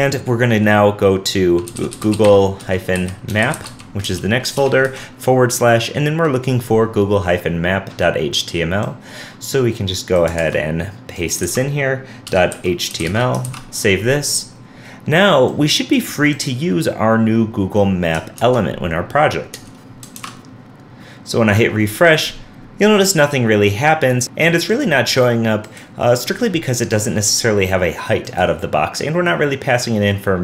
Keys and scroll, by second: 10.4 super+c, 11.4 super+v, 13.6 super+s, 18.4 super+Tab, 20.2 super+r, 24.2 super+r.